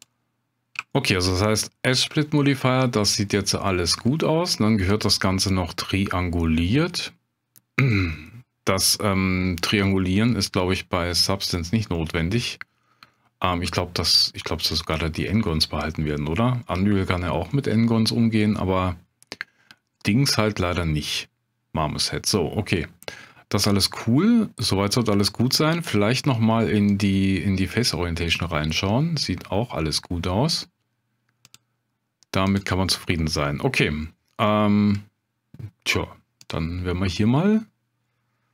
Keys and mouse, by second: 0.9 shift+drag, 2.6-4.0 middle drag, 4.9-7.9 drag, 10.3-11.2 middle drag, 11.9-12.4 middle drag, 13.1-14.5 middle drag, 15.6-16.3 middle drag, 16.6-17.0 middle drag, 17.5-18.1 middle drag, 18.4-19.4 drag, 18.4-19.4 middle drag, 18.4-19.4 right drag, 20.0-22.7 drag, 20.0-22.7 middle drag, 20.0-22.7 right drag, 25.7-27.3 drag, 27.9-30.0 middle drag, 31.5-32.9 drag, 34.5-34.9 middle drag.